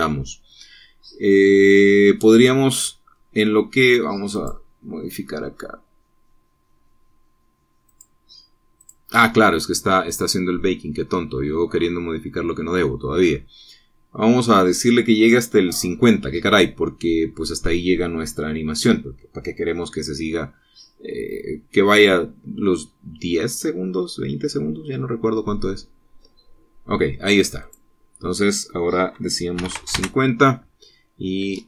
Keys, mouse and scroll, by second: 5.5 click, 9.1 click, 10.0 click, 28.8 click, 30.8 KP_5, 31.0 KP_0, 31.1 KP_Enter.